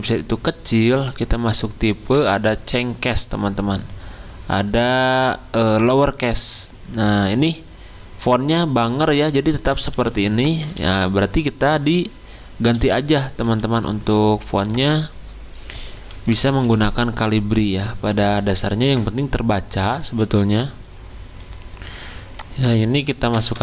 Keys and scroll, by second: 9.9 t, 10.8 ctrl+a, 13.4 ctrl+t, 15.9-17.2 typing, 23.3 0, 23.5 Return.